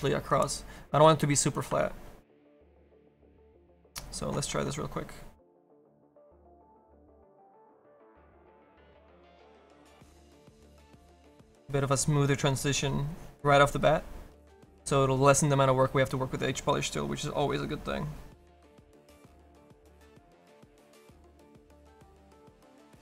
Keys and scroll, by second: 7.0 s, 22.7 s.